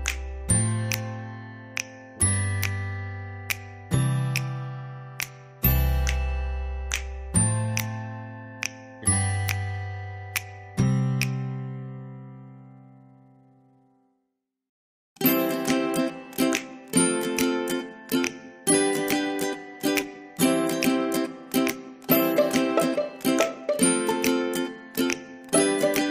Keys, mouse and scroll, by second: 0.5 ctrl+v, 3.0 click, 7.3-10.0 drag, 10.0 ctrl+c, 11.0 click, 13.6 ctrl+v, 16.0 click, 19.0 ctrl+v, 20.0 click, 21.9 ctrl+v, 24.9 click.